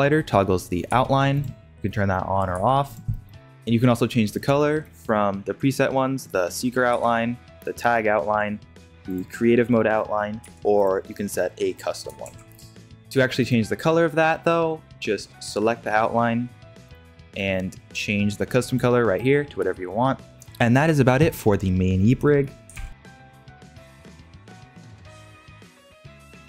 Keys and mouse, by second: 0.8 g, 1.8-2.5 middle drag, 2.5 g, 3.1 middle drag, 4.5-5.6 shift+middle drag, 6.9 g, 10.4 g, 12.2 ctrl+Tab, 13.4 click, 18.7 drag, 22.2 middle click, 22.7 ctrl+Tab.